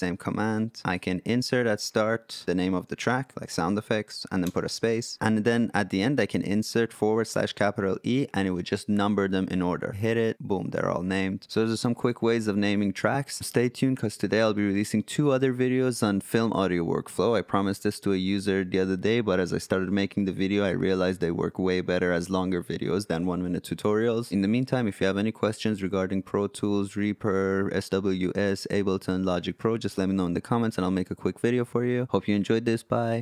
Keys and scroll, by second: 2.4-4.4 typing.